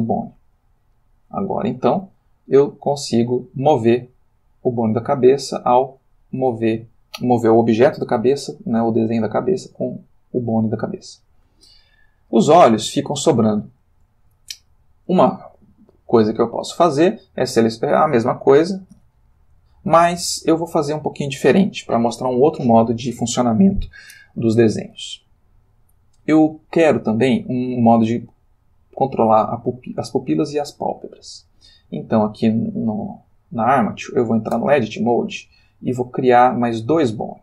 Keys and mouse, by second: 1.0 click, 2.1 r, 10.7 Escape, 11.8 ctrl+middle click, 12.5-14.1 ctrl+shift+middle drag, 14.6 ctrl+middle click, 16.5 click, 18.0 space, 18.4 shift+click, 21.5 click, 31.8 click, 32.8-34.0 ctrl+middle drag, 34.7 Tab, 35.5-36.5 shift+middle drag.